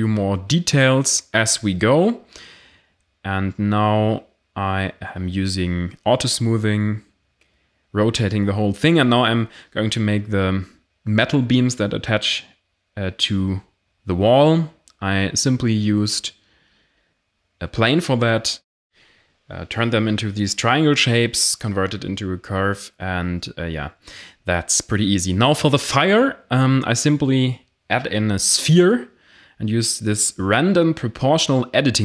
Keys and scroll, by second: 0.5 1, 2.4 a, 2.6 ctrl+j, 4.1-10.1 typing, 5.6 Tab, 7.1 Tab, 7.7 Caps_Lock, 10.5 Tab, 11.2 x, 11.6 Tab, 13.6 Tab, 14.2-22.0 typing, 14.6 Tab, 16.9 Tab, 19.2 Tab, 19.9 Tab, 23.4 g, 24.8 Tab, 28.3 o, 31.7 g.